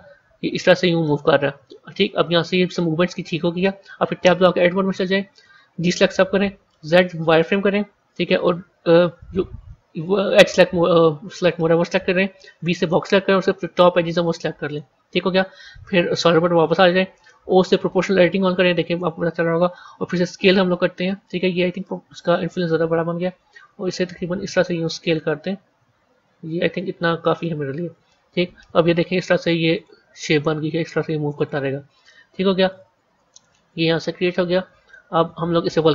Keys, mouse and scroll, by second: 4.5 Tab, 5.9 a, 6.8 z, 9.9 click, 12.5 b, 16.0 z, 17.9 o, 20.1 s, 27.8 Tab, 29.6-33.9 drag, 33.9 middle click, 34.7 scroll down 1.